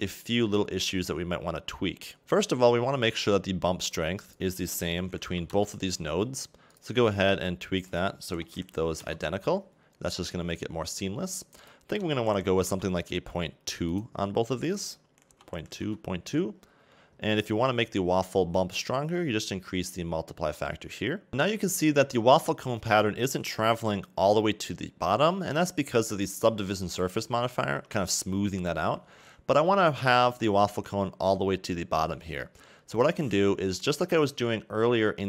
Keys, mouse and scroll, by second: 1.8 middle click, 5.5 click, 6.7 click, 7.8 click, 10.3-10.8 scroll down 2, 10.8-11.7 scroll up 2, 12.7 click, 13.9 click, 14.8 click, 18.0-18.5 scroll down 4, 19.6 click, 21.3 middle click, 21.5-21.8 scroll up 3, 22.0-26.9 scroll down 1, 27.8 Tab, 32.9 right click.